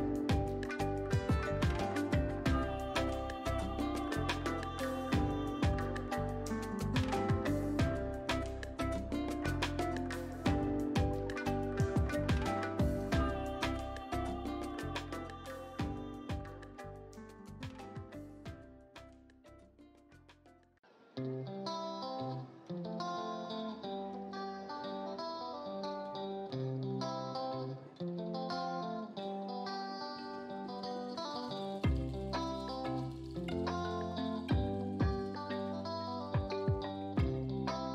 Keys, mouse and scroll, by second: 0.3 ctrl+t, 1.2-10.1 drag, 11.5 alt+click, 12.2-14.0 drag, 18.4-22.9 alt+drag, 22.9-28.3 alt+drag, 28.3 right click, 28.6-32.0 drag, 33.9 click, 36.3-37.9 drag.